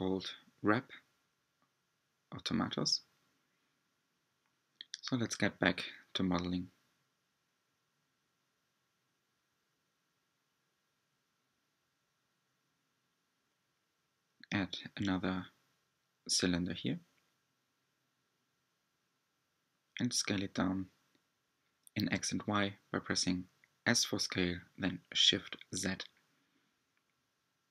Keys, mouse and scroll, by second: 0.0 drag, 1.2-5.5 middle drag, 5.5 click, 6.7-7.1 scroll down 1, 7.1 Tab, 9.2 click, 9.4 Tab, 10.3 Tab, 11.0-11.8 middle drag, 11.8 click, 16.2 s, 24.5 r.